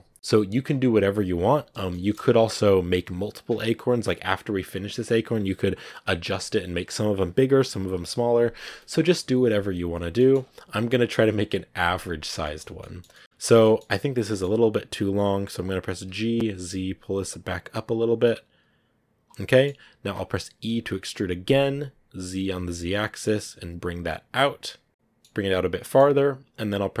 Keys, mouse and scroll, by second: 0.0 middle click, 0.9-1.8 scroll up 2, 1.8-16.0 shift+middle drag, 16.0 g, 19.3-20.5 middle drag, 20.5 e, 24.9-27.0 middle drag.